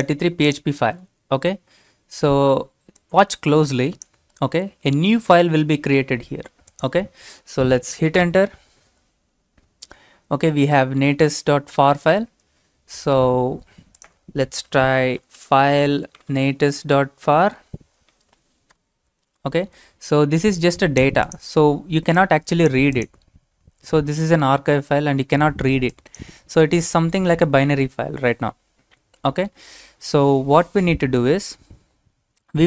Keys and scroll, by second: 8.2 Return, 14.7-19.2 typing, 16.6 Tab.